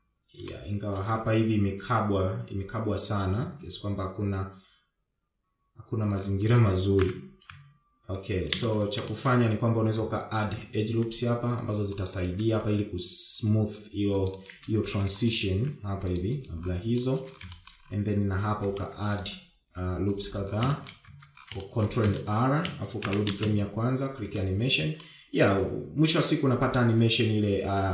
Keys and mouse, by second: 0.5-1.0 shift+middle drag, 3.3 Tab, 4.0 Tab, 7.5 shift+Left, 7.5 shift+Down, 8.4 space, 9.0 shift+middle click, 9.9 Tab, 10.7 ctrl+r, 12.4 ctrl+r, 16.9 shift+middle click, 17.4 shift+middle click, 18.6 ctrl+r, 20.6 shift+middle click, 21.1 Tab, 21.5 shift+middle drag, 22.0 shift+middle drag, 22.9 shift+Left, 23.1 space, 24.4-25.1 shift+middle drag.